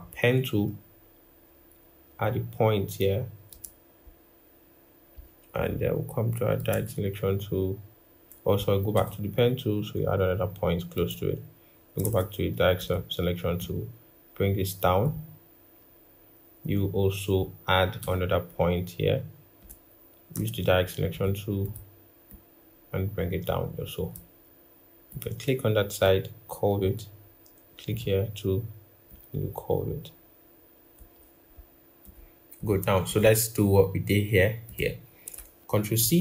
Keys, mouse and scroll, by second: 8.7 typing, 11.8 typing, 20.1 typing, 35.8 ctrl+c.